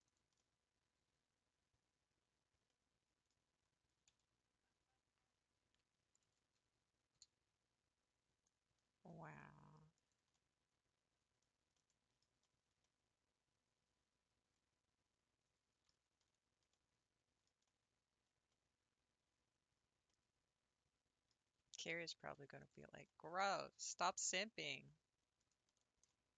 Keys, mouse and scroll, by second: 0.4-3.3 middle drag, 3.3-3.6 scroll down 2, 6.1 alt+click, 6.6-7.2 scroll up 3, 7.2 s, 10.4-15.9 middle drag, 15.9 Tab, 16.3 scroll down 3, 16.7-21.4 middle drag, 21.4-21.8 scroll up 1, 22.6 alt+click, 23.1 middle click, 23.4 s, 25.7-26.2 scroll down 7, 26.2 middle click.